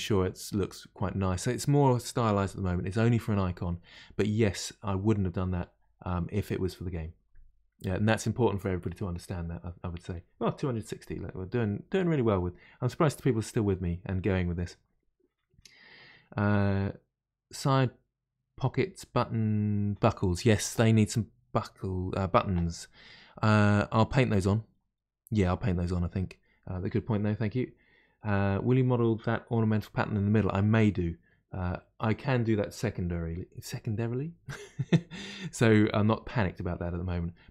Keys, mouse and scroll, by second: 22.9-25.9 middle drag.